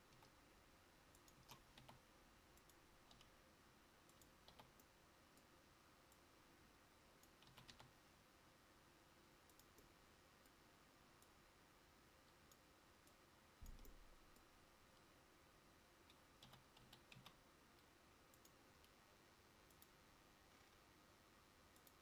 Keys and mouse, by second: 1.5 s, 3.2 g, 6.7 click, 16.5 g, 20.0 click.